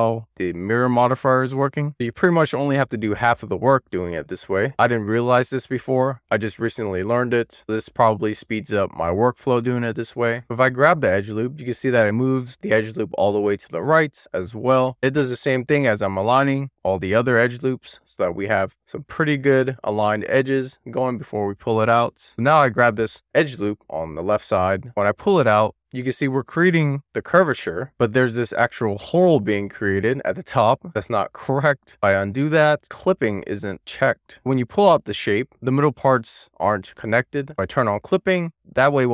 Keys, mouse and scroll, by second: 2.1 click, 3.6 click, 5.9 click, 7.5 click, 12.1 click, 13.4 click, 17.2 click, 21.3 click, 21.9 alt+z, 22.2 middle click, 24.3-25.8 middle drag, 28.7 click, 30.8 middle click, 31.9 super+z, 32.7 middle click, 34.5 1, 38.2 click.